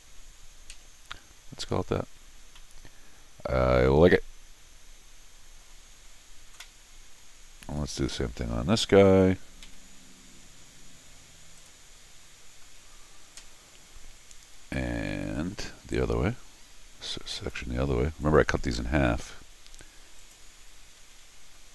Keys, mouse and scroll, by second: 2.4 scroll down 2, 2.6-5.6 middle drag, 6.8 scroll up 1, 7.2 scroll down 1, 7.4 middle click, 7.8 middle click, 8.1 Escape, 9.6 u, 11.6 click, 17.4 click, 18.2 click, 20.2 click.